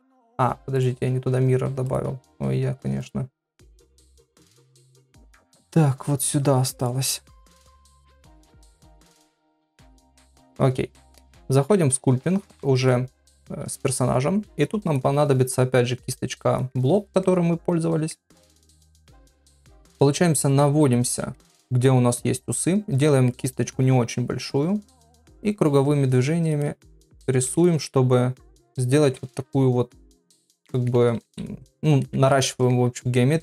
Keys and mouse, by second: 1.8 click, 3.0 click, 5.8-6.9 drag, 7.6-9.7 drag, 10.4 click, 11.0 click, 11.4 ctrl+Tab, 17.3 ctrl+middle click, 18.4 ctrl+middle click, 18.9 middle click, 19.4 middle click, 20.0 ctrl+middle click, 20.6 middle click, 21.4 ctrl+middle click, 23.3 middle click, 24.9-26.5 drag, 26.6 middle click, 27.7 middle click, 28.5 click, 29.1 ], 29.2-31.5 ], 29.8 click, 30.6 middle click, 31.5 click, 32.3 middle click, 33.2 middle click.